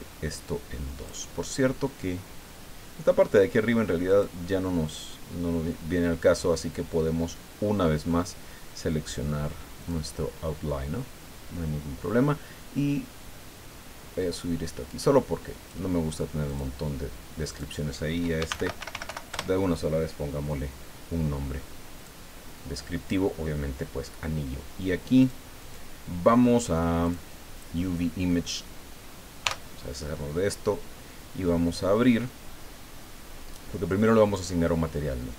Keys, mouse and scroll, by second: 4.1 click, 9.8 click, 14.3-15.9 drag, 16.5 click, 17.5 click, 18.1-19.6 typing, 22.0-23.3 drag, 25.2 click, 25.6 click, 27.0 click, 29.4 t.